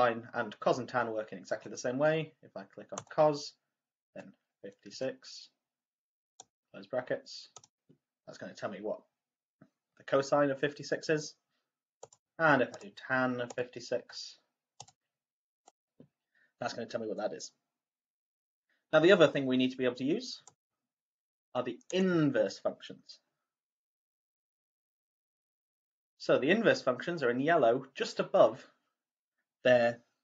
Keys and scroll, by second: 4.0 5, 4.8 6, 6.3 ), 7.5 =, 13.4 5, 13.9 6, 14.8 ), 15.6 =.